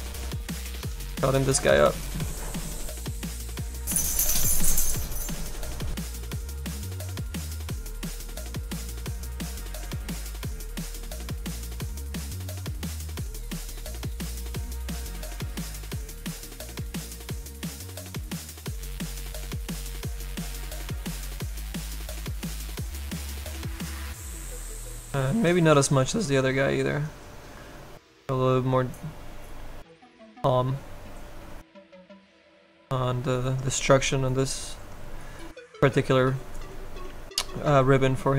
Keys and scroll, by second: 37.1 s.